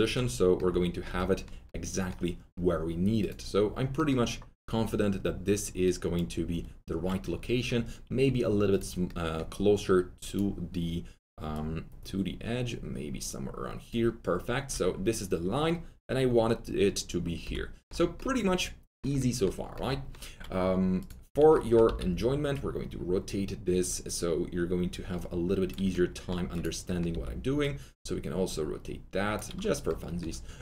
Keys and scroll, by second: 21.8 alt+e, 27.1 e.